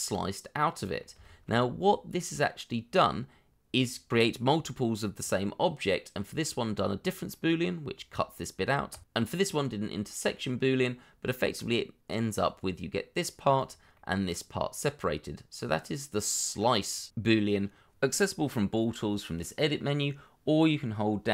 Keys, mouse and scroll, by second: 1.2 shift+middle click, 1.6 scroll up 1, 4.1 double click, 7.3 middle click, 9.8 middle click, 10.9 middle click, 13.9 middle click, 16.8 scroll down 1, 17.8-18.3 scroll down 1, 19.9-21.3 scroll down 1.